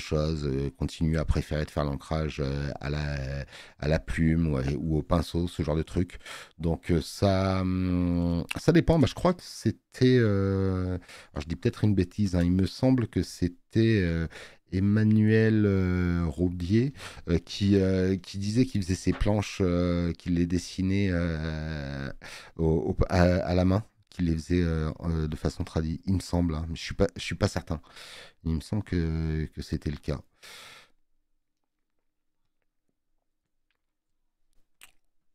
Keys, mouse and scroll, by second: 7.4 space, 7.5 click.